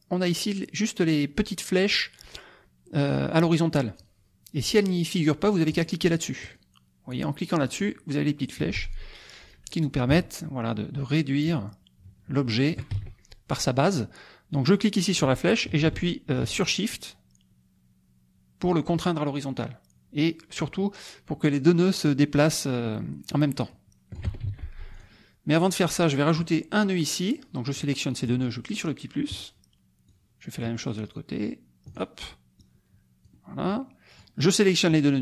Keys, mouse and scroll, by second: 5.7 click, 6.4 click, 7.1 click, 7.7 click, 10.1-12.9 ctrl+shift+drag, 12.9 ctrl+shift+z, 14.6-24.4 drag, 24.4 ctrl+shift+z, 24.9 ctrl+shift+click, 25.6 click, 27.7 click, 29.3 click, 30.1 click, 31.8 click, 32.6 click, 33.7 click.